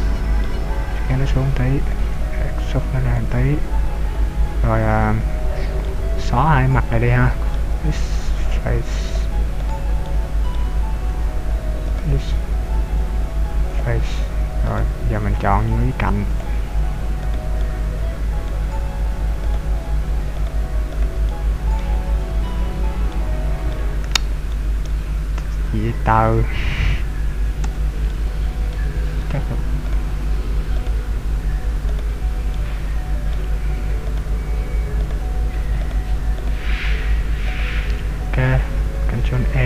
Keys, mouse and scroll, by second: 0.9 click, 2.1 e, 3.3 click, 4.2-4.7 scroll up 3, 5.4 scroll down 1, 5.9 middle click, 7.9 x, 9.7 right click, 10.3 middle click, 12.1 shift+right click, 12.9 x, 14.7 right click, 16.5 click, 17.4 right click, 17.6 middle click, 19.6 shift+right click, 20.6 shift+right click, 21.1 shift+right click, 28.2 middle click, 30.1 shift+right click, 31.0 shift+right click, 32.3 shift+right click, 32.7 middle click, 34.4 shift+right click, 35.1 shift+right click, 35.9 shift+right click, 36.6 shift+right click, 37.6 shift+right click, 39.4 ctrl+e.